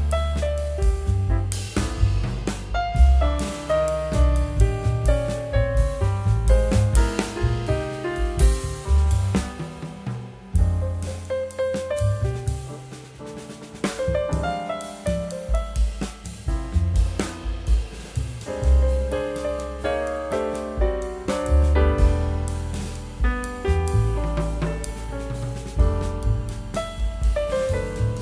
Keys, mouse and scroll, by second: 14.8 double click, 15.0 shift+click, 16.1 shift+click, 16.9 shift+click, 17.7 shift+click, 19.0 shift+click, 20.4 shift+click, 22.0 double click.